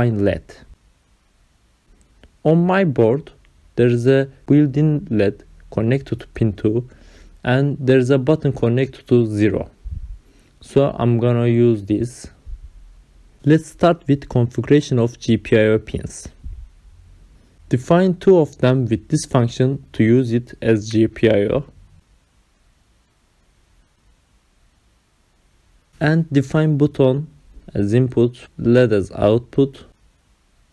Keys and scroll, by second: 0.0-5.0 typing, 15.7 BackSpace, 17.9 ctrl+c, 19.2 ctrl+v, 23.8 ctrl+c, 25.5 Return, 26.2 Up, 27.3 ctrl+v, 30.3 ctrl+c.